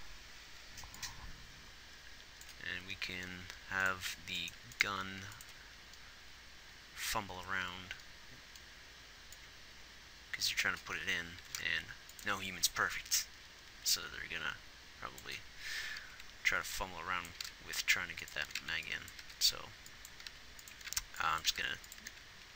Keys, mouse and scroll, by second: 5.5 ctrl+s, 17.7 g, 20.7 g, 21.1 a, 21.9 g.